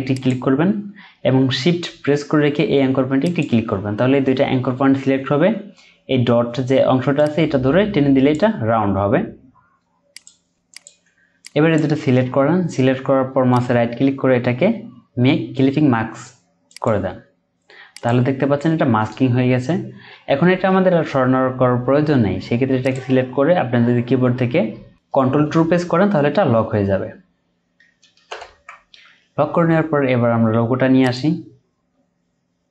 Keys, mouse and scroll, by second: 3.2 shift+click, 10.5 Down, 13.5 right click, 25.4 ctrl+2, 27.0-28.0 scroll down 1, 28.3 ctrl+0, 31.5-32.0 scroll down 1.